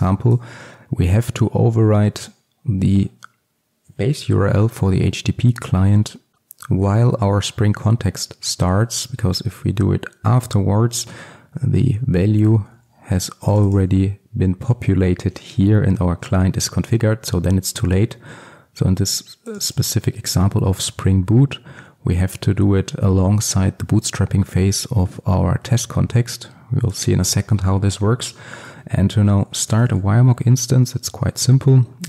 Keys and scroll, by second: 12.7 alt+1, 20.7 alt+1, 31.6 Return.